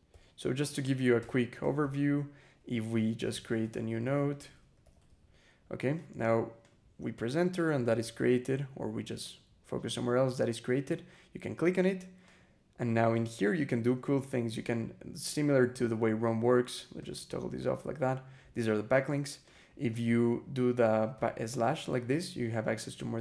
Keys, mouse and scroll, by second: 0.0 e, 0.6 click, 1.0 space, 1.4 [, 2.9-5.5 typing, 5.8 click, 6.4 click, 7.0 click, 7.5 Return, 8.4 BackSpace, 9.1 click, 12.1 click, 13.0 click, 16.8 click, 17.4 click, 18.8 click, 19.3 click, 19.7 click, 21.0 /.